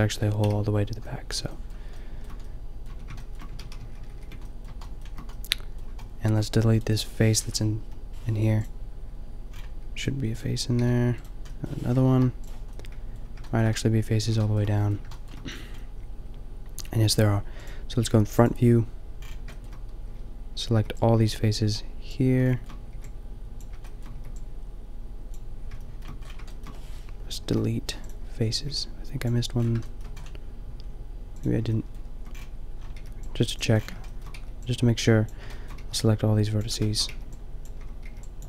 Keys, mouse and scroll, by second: 0.4 KP_5, 1.4 shift+middle click, 2.9 Tab, 3.8 ctrl+z, 4.0 ctrl+z, 4.1 ctrl+z, 6.7 click, 7.8 Delete, 10.8 g, 12.1 Delete, 13.0 middle click, 20.8 b, 23.0 b, 24.2 b, 27.5 Delete, 28.6 b, 33.0 b, 34.3 b, 35.9 b, 37.2 b, 38.1 b.